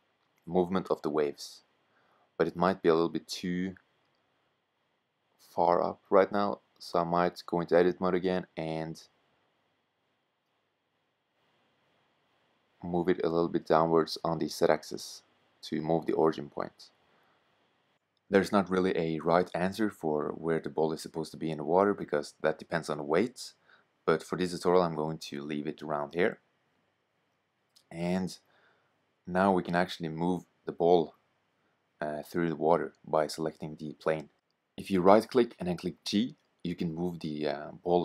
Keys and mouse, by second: 4.6-7.1 drag, 8.6 g, 10.8 g, 13.4 Tab, 14.6 g, 16.2 Tab, 24.1-26.8 drag, 29.4-33.7 middle drag, 33.7-38.0 right drag, 34.7 g.